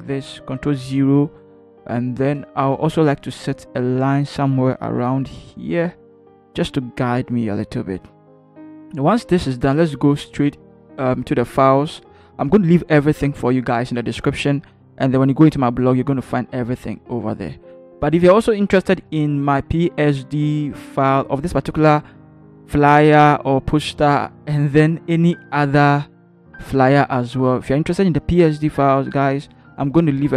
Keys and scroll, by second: 0.6 ctrl+0, 2.6 v.